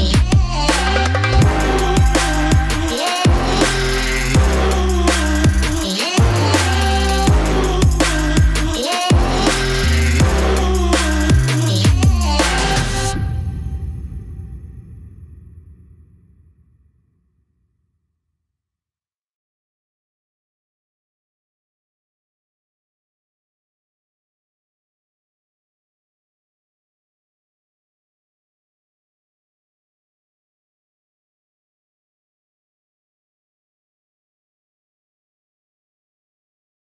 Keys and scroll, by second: 2.2 ctrl+i, 9.9 ctrl+c, 11.3 ctrl+v, 11.9 ctrl+a, 33.0 ctrl+z.